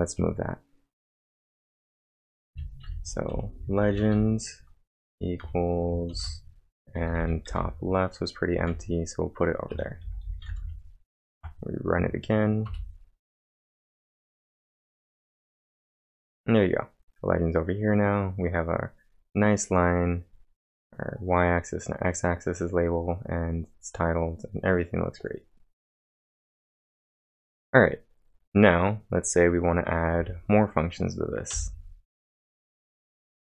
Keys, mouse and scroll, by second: 0.0-1.0 typing, 1.4-2.9 drag, 2.5-6.1 typing, 8.3-10.7 typing, 11.3 ctrl+`, 12.0 Up, 12.7 Return, 24.2-28.2 drag, 25.2 click, 28.2 click, 28.9-30.1 drag, 30.1 j, 31.5 o, 32.5-33.5 typing.